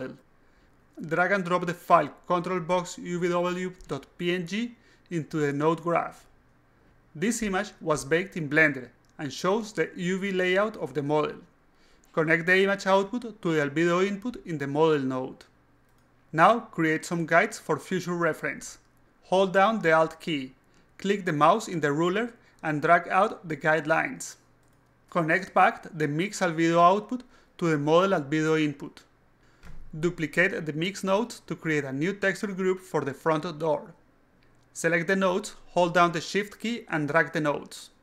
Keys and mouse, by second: 2.4 click, 3.1 click, 4.3 click, 4.7 click, 6.0 click, 11.7 click, 12.9 click, 14.1-15.9 alt+drag, 16.6 alt+click, 17.2 alt+click, 18.2 alt+click, 18.8 alt+click, 19.7 alt+click, 20.5 alt+click, 21.8 alt+click, 23.0 alt+click, 25.4 click, 25.6 click, 27.1 click, 28.6 click, 28.8 click, 35.1 click, 36.8-38.0 shift+drag.